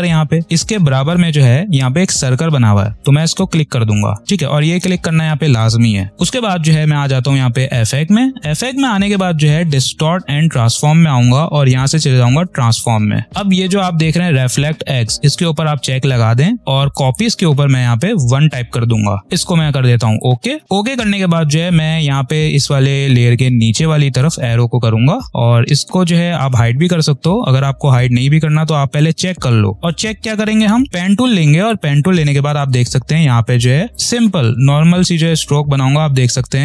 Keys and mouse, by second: 7.8 click, 12.7 click, 15.5 click, 18.2 1, 20.1 click, 23.5 click, 28.3 click, 29.7 p, 31.5 click.